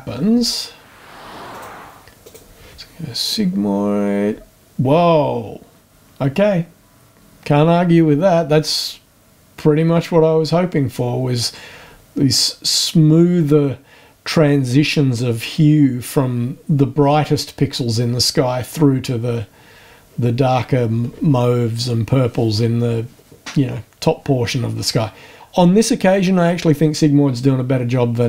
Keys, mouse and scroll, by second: 1.5 click, 2.2 click, 3.6-4.0 scroll down 1.